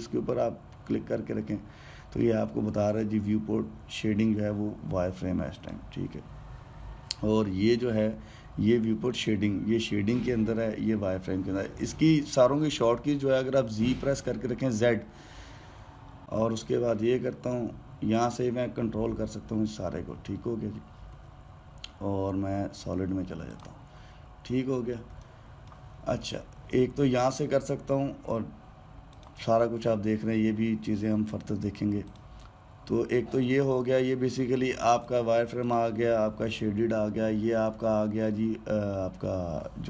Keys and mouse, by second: 6.3 click, 9.9 click, 14.6 z, 16.2-17.2 middle drag, 17.2 z, 20.8 z, 22.0 z, 22.8 z, 24.3 click, 25.2-29.0 middle drag, 29.9-32.9 drag, 34.3 click, 35.9 click, 36.4 click.